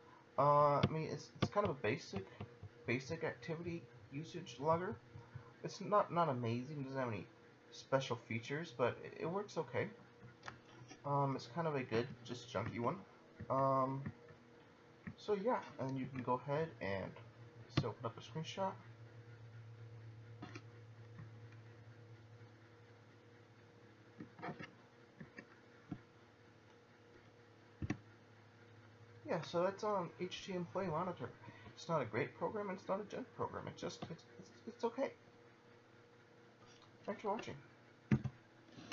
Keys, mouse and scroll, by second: 1.9 double click, 2.4 click, 11.9 Down, 12.6 Down, 13.4 Down, 14.1 Down, 15.1 Down, 16.0 Return, 18.0 click, 21.2 Left, 24.5 Right, 25.2 Left, 27.8 F7, 35.5 click, 38.1 F12.